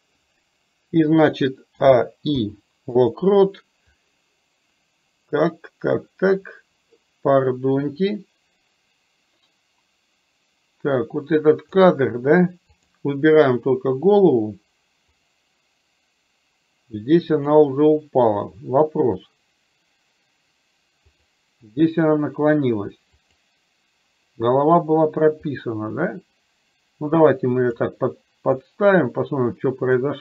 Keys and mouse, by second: 4.0-11.8 drag, 15.2 click, 17.5 click, 21.2 click, 23.3 click, 25.7-28.0 drag, 28.7-30.0 drag.